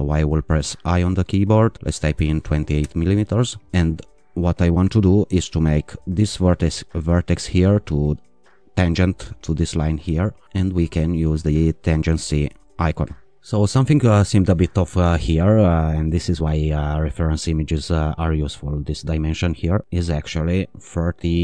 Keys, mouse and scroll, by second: 0.6 i, 1.7-2.6 typing, 2.8 Return, 4.4-5.4 scroll up 2, 6.6 click, 8.3 click, 11.9 click, 19.0 click, 20.6-21.4 typing.